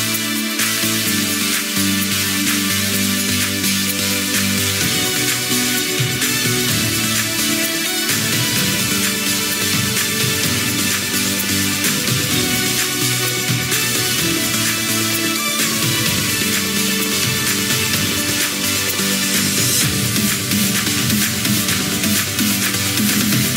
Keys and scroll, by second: 2.4 ctrl+c, 2.6 ctrl+v, 22.6 ctrl+q, 23.3 ctrl+z.